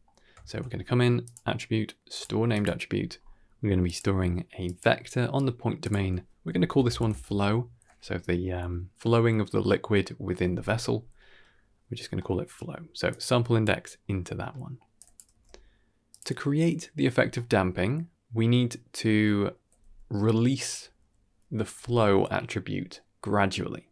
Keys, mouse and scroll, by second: 0.0 scroll up 2, 0.0 x, 0.3 shift+a, 2.9-3.4 scroll up 3, 3.7-4.7 drag, 5.7-7.0 drag, 11.1 middle click, 12.0 middle click, 13.0-13.5 drag, 14.2 scroll down 1, 14.4 middle click, 14.8 drag, 15.2 g, 17.0 scroll down 2, 17.2 middle click, 18.1 scroll down 2, 18.3 middle click, 19.1 click.